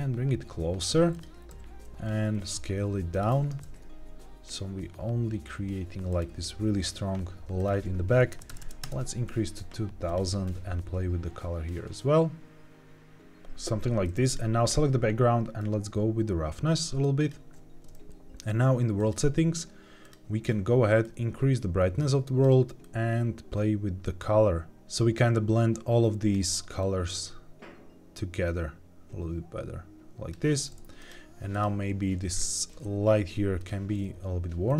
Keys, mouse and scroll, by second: 1.0 click, 1.4 s, 3.0 click, 3.2 g, 3.5 shift+z, 6.0 click, 7.5-8.7 drag, 8.4 KP_0, 8.5 KP_0, 10.0 click, 14.1 click, 15.5-17.2 drag, 18.9 click, 19.9 click, 30.9 click, 31.4 click, 32.2 scroll down 2, 32.6 g, 32.7 z, 33.5-34.6 drag.